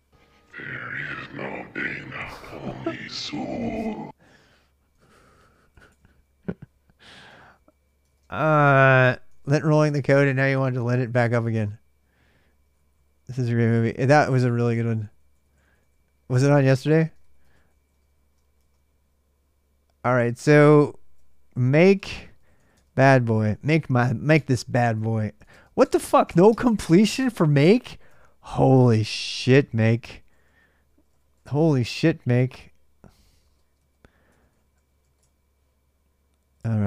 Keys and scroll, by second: 4.9-6.1 typing, 7.1 ctrl+[, 7.3 ctrl+j, 7.3-9.8 typing, 12.5 ctrl+[, 12.7 ctrl+j, 12.7-18.8 typing, 20.1-25.6 typing, 26.9-31.6 typing, 32.7-36.8 typing.